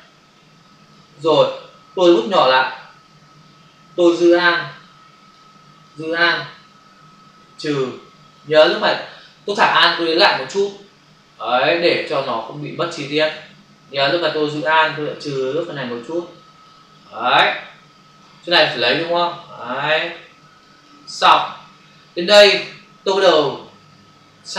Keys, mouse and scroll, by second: 2.6 [, 4.0 alt+click, 5.8 alt+click, 9.9 click, 12.8 click, 15.4 alt+click, 17.9 space, 18.9 click, 20.6 click, 21.2 space.